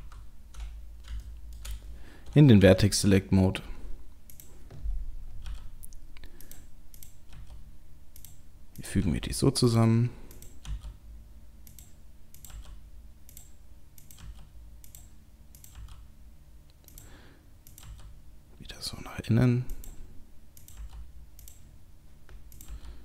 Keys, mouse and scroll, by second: 0.0 KP_7, 0.6-1.7 scroll up 5, 1.2 shift+middle click, 2.6 1, 3.4-4.3 scroll up 1, 4.3 click, 4.3-4.9 scroll up 1, 5.5 g, 7.0 click, 7.3 g, 8.8 click, 9.0 g, 10.3 click, 10.7 g, 12.4 click, 12.5 g, 14.0 click, 14.2 g, 15.6 click, 20.6 click, 20.8 g, 22.6 click, 22.7 g.